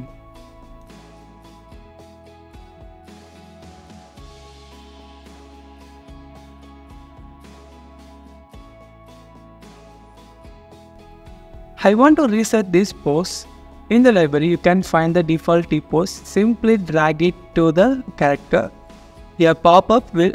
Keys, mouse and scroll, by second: 4.1-6.6 typing, 9.4 typing, 12.7 scroll down 1, 13.0 scroll up 1, 13.5-14.2 scroll down 1, 14.2 typing.